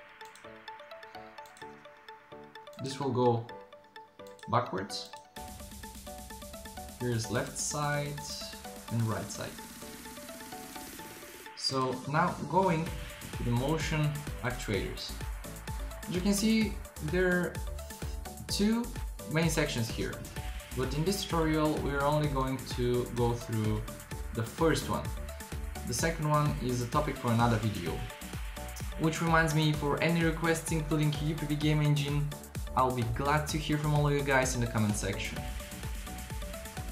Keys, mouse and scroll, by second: 0.3-6.1 drag, 13.6-16.8 drag, 22.4-24.1 drag, 25.8 drag.